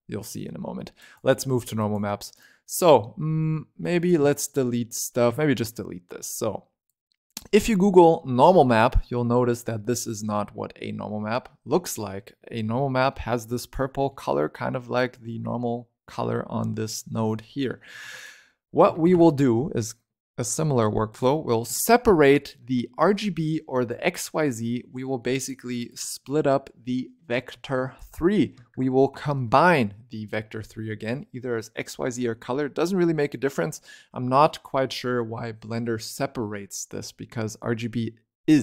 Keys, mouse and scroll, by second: 0.9 click, 1.7 click, 2.2 click, 3.9 click, 4.1 x, 4.3 click, 5.2 x, 5.3-6.8 middle drag, 6.8 click, 8.5 click, 9.4-12.0 scroll up 4, 12.0-12.8 scroll down 4, 13.0 shift+middle click, 13.4-14.7 scroll up 20, 13.6 shift+middle click, 14.7-16.8 shift+middle drag, 16.8-17.2 scroll down 10, 17.2 shift+middle click, 17.9 shift+a, 24.9 middle click, 25.3 click, 27.6 shift+a.